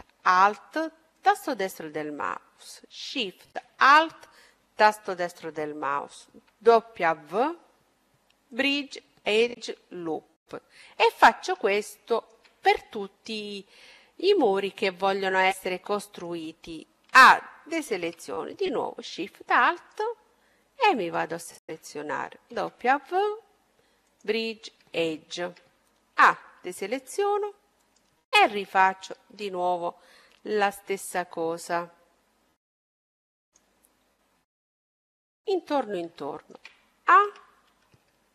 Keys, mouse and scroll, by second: 1.0-4.2 right drag, 6.3 w, 9.2 middle click, 9.9-17.0 middle drag, 16.7 a, 19.4-22.6 right drag, 22.2 w, 24.5 middle click, 25.7 a, 27.3-30.3 right drag, 30.1 w, 33.9-37.7 middle drag, 37.0 a.